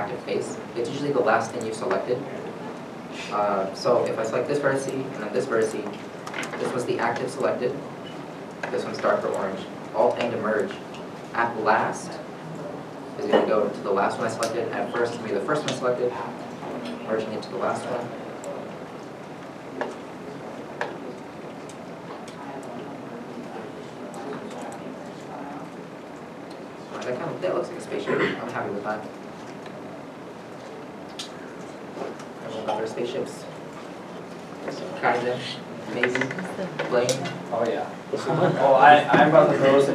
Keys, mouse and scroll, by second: 2.5 shift+middle click, 2.8 middle click, 2.8 scroll up 1, 3.4 shift+middle click, 3.5 scroll up 2, 4.1-4.4 scroll up 1, 5.2 1, 5.7 shift+click, 10.0 shift+click, 10.1 alt+m, 18.0 middle click, 19.8 scroll down 1, 20.7 shift+middle click, 21.6 middle click, 21.9 shift+middle click, 21.9-22.5 scroll down 1, 22.5-23.3 scroll down 1, 23.3 middle click, 23.6 middle click, 24.2 middle click, 24.7 1, 24.8 middle click, 25.8 middle click, 25.9-26.3 scroll down 1, 26.3 scroll up 1, 26.9 middle click, 28.8 middle click, 28.9 scroll down 1, 29.3 middle click, 29.3 scroll, 29.8 Tab, 30.6 Tab, 32.0 shift+middle click, 34.0 middle click, 35.0 shift+middle click, 35.5 middle click.